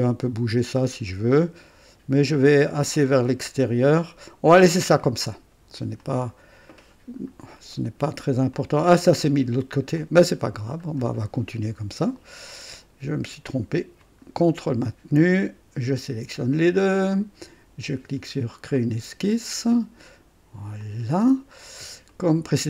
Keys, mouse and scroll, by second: 6.0 click, 7.0-7.3 scroll down 2, 7.8 right click, 8.6-9.9 drag, 10.0 click, 10.8 scroll up 2, 11.2 right click, 12.0 right click, 14.0 click, 15.9 ctrl+click, 18.7 click, 20.8 click, 21.7-22.1 scroll up 1, 22.1 right click.